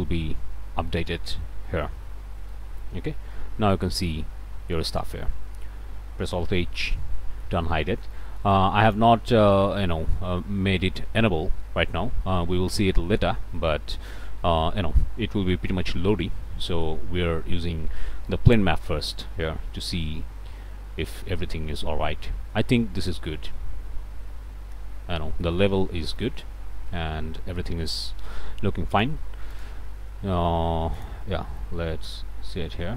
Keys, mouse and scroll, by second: 0.5 scroll up 2, 2.0 scroll up 2, 5.5-6.7 drag, 6.6 alt+h, 7.7 alt+a, 16.2 h, 17.1-17.8 scroll up 2, 18.6 shift+scroll up 2, 18.9 scroll down 2, 29.5 click, 31.0 click, 31.6-32.9 middle drag.